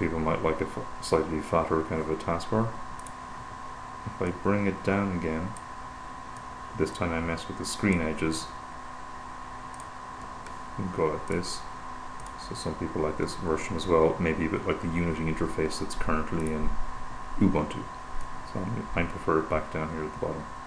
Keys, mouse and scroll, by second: 0.0 click, 3.5 click, 5.1-6.5 drag, 6.8-9.0 drag, 10.1 click, 11.6 click, 12.6 click, 15.3-17.5 drag, 18.6 click, 20.0-20.6 drag.